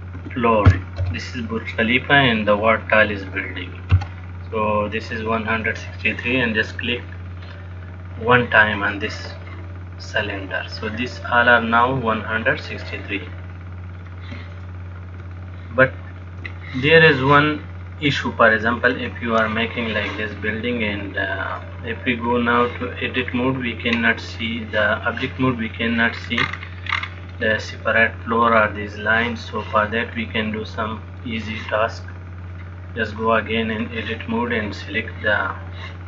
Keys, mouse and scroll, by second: 7.7 click, 14.1 click, 15.7 shift+middle click, 18.2 click, 19.1 click, 21.8 click, 23.5 middle click, 26.3-26.6 scroll down 7, 26.6-27.2 scroll up 1, 27.2-27.7 scroll up 7, 27.7 middle click, 27.7 scroll up 4, 28.7-29.6 scroll down 1, 29.6-30.3 scroll down 1, 30.5 middle click, 32.7 click.